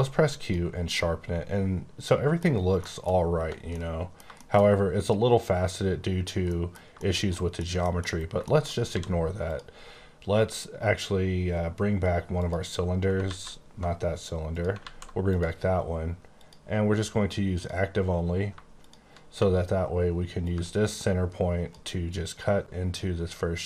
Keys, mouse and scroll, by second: 0.2 click, 0.9 middle click, 2.4 scroll down 1, 2.7 Caps_Lock, 3.1 middle click, 3.7 middle click, 6.4 middle click, 8.0-8.3 shift+scroll down 3, 8.3 shift+middle click, 8.8 d, 9.5 click, 12.4 click, 13.2 alt+z, 14.5 click, 14.8 alt+z, 15.3 click, 16.3 click, 17.6 click, 18.7 click, 20.4 ctrl+click, 20.7 click, 23.0 click, 23.2 e.